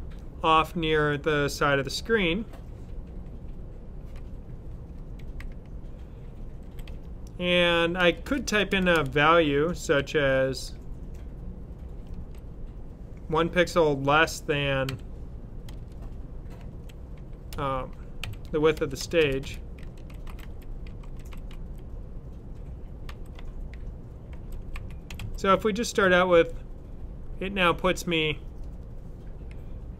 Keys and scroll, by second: 4.5-8.6 typing, 12.0 typing, 13.3 typing, 14.7-21.9 typing, 23.0-25.9 typing.